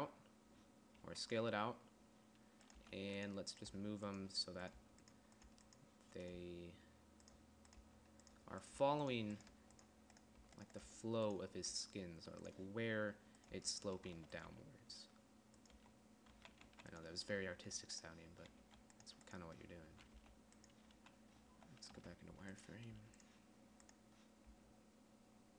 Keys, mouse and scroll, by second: 0.1 z, 1.5 s, 3.3 g, 4.2 g, 5.3 g, 5.9 g, 6.8 g, 8.2-12.2 typing, 14.0 g, 14.6 z, 15.0 g, 16.3-19.1 typing, 20.4-23.4 typing, 25.0 g.